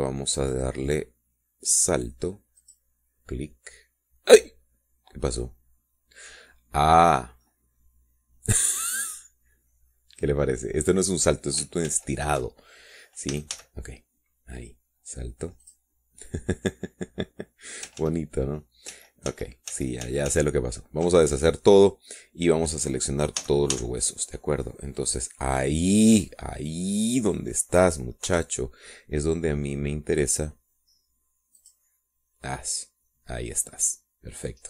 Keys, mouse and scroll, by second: 1.9 click, 4.1 click, 8.7-9.1 scroll down 2, 9.1-12.5 drag, 13.4 ctrl+z, 14.9 a, 17.2 click, 19.6 ctrl+z, 20.5 ctrl+z, 25.0 a, 28.6-29.6 drag, 29.8 Return, 33.2 click.